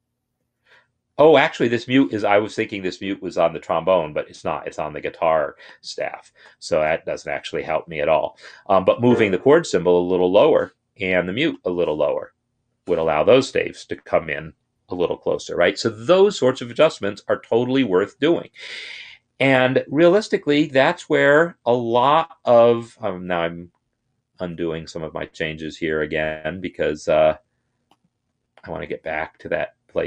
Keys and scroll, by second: 0.1 ctrl+Up, 1.2 ctrl+Down, 6.2 ctrl+r, 7.5 Escape, 9.7 ctrl+Down, 12.2 ctrl+Down, 17.0 ctrl+z, 17.6 ctrl+z, 18.8 ctrl+z, 20.0 ctrl+z, 21.2 ctrl+z, 21.8 ctrl+z, 23.0 ctrl+z, 24.2 ctrl+z, 28.6 ctrl+z.